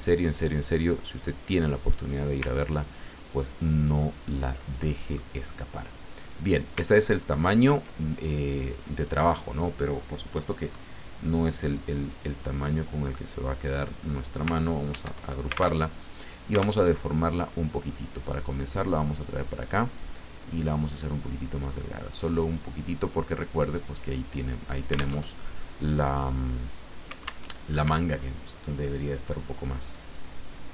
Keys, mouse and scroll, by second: 2.6-3.0 ctrl+scroll down 2, 3.9-4.4 ctrl+scroll down 2, 4.8 middle click, 6.2 click, 7.0-7.7 ctrl+scroll up 4, 8.4-9.4 drag, 11.8 click, 12.2-13.7 drag, 14.9 ctrl+g, 15.8 ctrl+alt+Tab, 16.8 alt+Tab, 18.1-19.7 drag, 20.8-22.7 drag, 22.9-24.8 drag, 25.2 alt+Tab, 27.4 alt+Tab, 28.0-28.6 ctrl+scroll down 4, 30.1-30.7 drag.